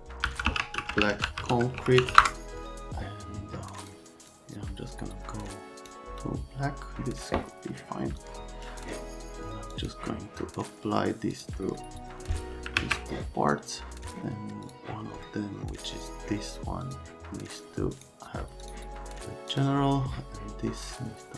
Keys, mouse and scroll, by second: 0.0-2.6 typing, 3.8 click, 4.3 click, 8.2 click, 9.7 click, 11.3 click, 12.8 alt+q, 14.1 click, 14.7 click, 16.8 click, 18.0 click, 18.6 click, 19.5 click.